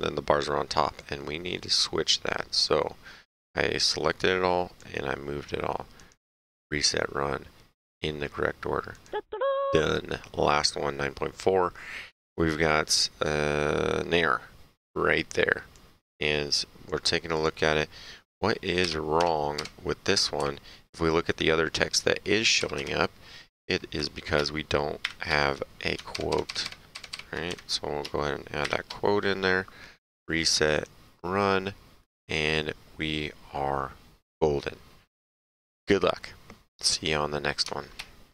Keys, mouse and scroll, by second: 1.0 click, 3.9 click, 6.0 click, 8.9 click, 9.8 Page_Down, 15.7 click, 17.3 click, 18.8 Down, 19.2 Left, 19.6 Right, 20.4 Up, 22.6 Down, 22.8 Left, 25.0 shift+', 26.1 ctrl+Right, 27.5 Left, 28.6 shift+', 30.5 click.